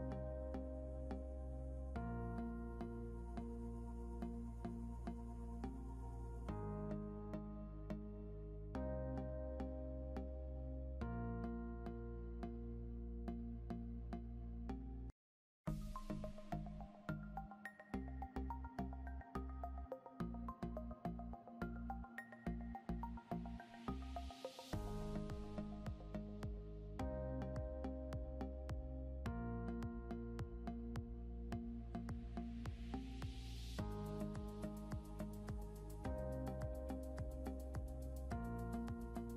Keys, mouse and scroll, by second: 1.4 click, 1.8 scroll up 1, 2.3 scroll down 1, 3.2 click, 4.4 scroll up 1, 5.4 click, 7.9 ctrl+l, 9.0 scroll up 1, 9.5 click, 11.9 scroll down 1, 13.2 click, 15.4 scroll up 1, 16.7 click, 19.5 scroll down 1, 20.1 click, 24.9 ctrl+Num_Lock, 25.0 ctrl+l, 26.7 click, 30.5 scroll up 1, 31.1 click, 34.0 click, 35.7 scroll down 1, 36.8 scroll up 1, 38.2 scroll up 1, 38.7 click.